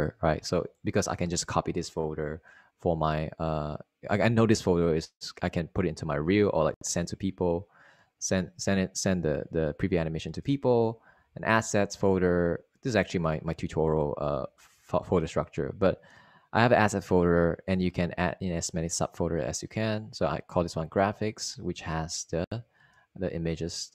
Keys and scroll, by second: 1.2 Right, 1.9 Left, 6.1 Right, 7.3 Down, 7.9 Down, 11.5 Down, 11.9 Left, 13.0 Right, 13.7 Down, 14.2 Down, 14.8-17.1 typing, 22.4 Right, 22.9 Down, 23.3 Right.